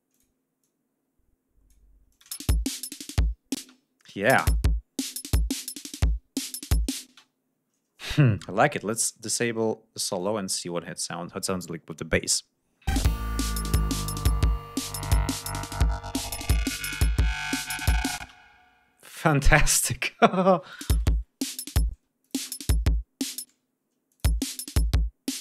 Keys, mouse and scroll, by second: 0.1 click, 0.6-1.9 drag, 2.1 ctrl+click, 2.3 space, 2.5 ctrl+scroll down 2, 3.6 space, 4.1 click, 4.4 space, 7.1 ctrl+space, 7.3 ctrl+scroll up 2, 7.7 ctrl+scroll down 2, 9.0 click, 10.2 click, 12.9 space, 18.3 ctrl+space, 20.8 click, 20.9 space, 21.2 ctrl+scroll up 2, 21.9 space, 22.2 click, 23.5 space, 24.1 click, 24.3 space.